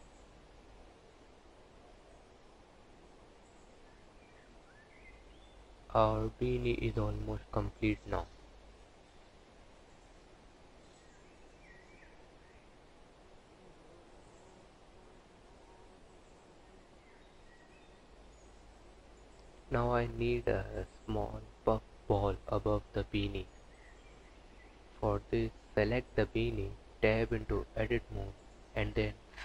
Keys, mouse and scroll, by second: 4.9 click, 5.7 click, 7.0 click, 10.0 KP_1, 10.4 KP_3, 11.2 click, 11.6 click, 11.9 g, 13.1 r, 13.9 g, 14.5 click, 15.5 click, 17.3 click, 18.0 click, 18.7 click, 21.7 ctrl+z, 22.8 click, 23.6 click, 26.5 Tab, 27.5 3, 28.9 click.